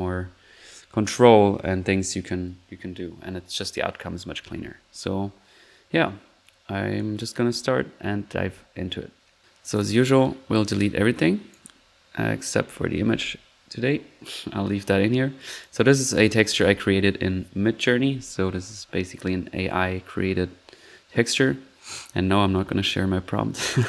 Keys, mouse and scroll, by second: 6.9 click, 10.5-12.0 drag, 13.1 Delete, 13.8 middle click, 15.4-15.8 drag, 22.7 typing, 22.9 middle click, 23.6-23.8 drag.